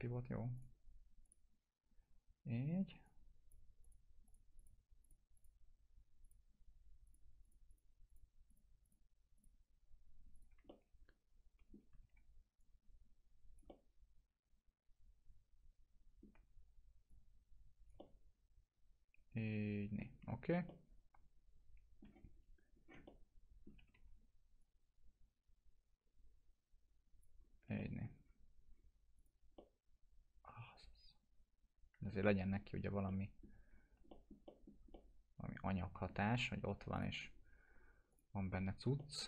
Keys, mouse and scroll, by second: 10.7-11.9 alt+middle drag, 12.0 w, 12.6-16.5 click, 13.7-17.1 alt+middle drag, 17.1-20.1 click, 18.0-20.1 alt+middle drag, 20.1 scroll down 1, 20.6-22.2 alt+middle drag, 22.3 scroll up 1, 23.0-23.7 alt+middle click, 23.5-24.4 typing, 24.6-27.4 drag, 27.3 scroll down 1, 27.8 alt+middle click, 28.2 scroll down 1, 29.2 click, 29.6-32.4 alt+middle drag, 32.5 scroll up 1, 33.1-33.7 alt+middle click, 33.7 scroll down 1, 34.1 alt+middle click, 34.4 middle click, 34.9-36.2 alt+middle drag, 36.3 scroll up 1, 36.9 click.